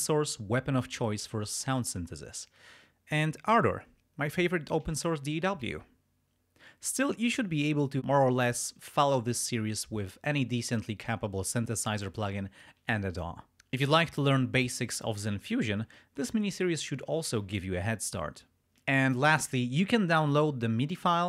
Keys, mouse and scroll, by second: 2.9 scroll up 2.